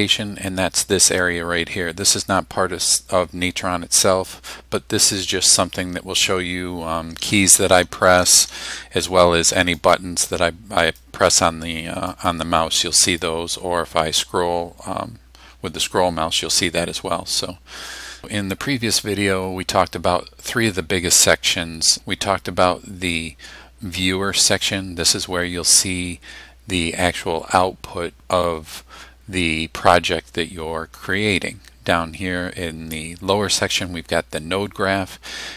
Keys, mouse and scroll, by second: 1.1 click, 1.7 click, 2.3-5.4 drag, 6.7-8.8 typing, 9.8 click, 10.9 right click, 12.2 click, 13.0 right click, 14.5-14.9 scroll down 2, 15.0-15.4 scroll up 2, 15.5 scroll down 2, 15.8-16.1 scroll up 2, 16.1 scroll down 2, 16.4 scroll up 2, 16.6 scroll down 2, 16.8 scroll up 1.